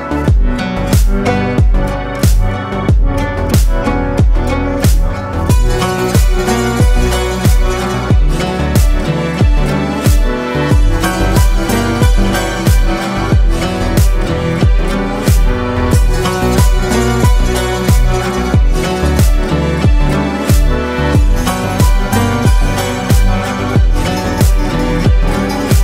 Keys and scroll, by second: 1.4 space, 2.0 ctrl+space, 10.1 ctrl+space, 13.2 ctrl+c, 18.5 ctrl+z.